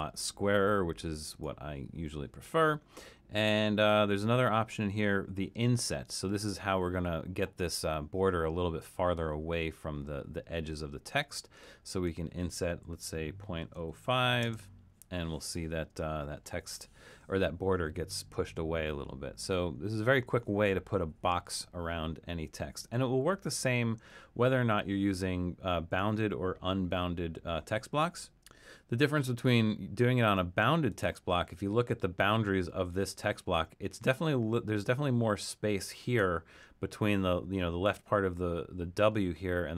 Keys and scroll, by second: 12.9-14.3 typing.